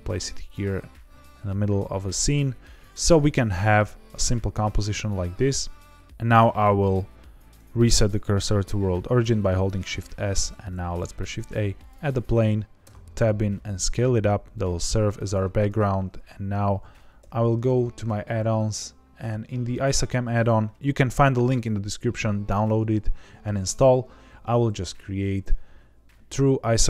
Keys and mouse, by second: 0.4 click, 0.6-2.2 middle drag, 5.0-5.9 middle drag, 6.4 shift+s, 10.6 shift+a, 12.8 Tab, 13.1 s, 15.1 click, 15.3 Tab, 17.1 n, 19.6 click.